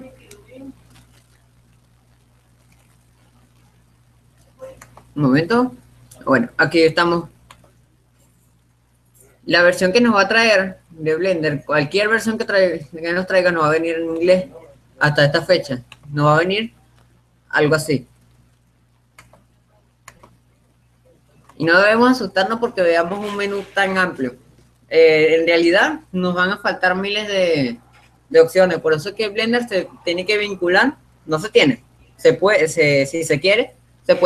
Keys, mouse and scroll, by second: 29.2-30.7 right drag.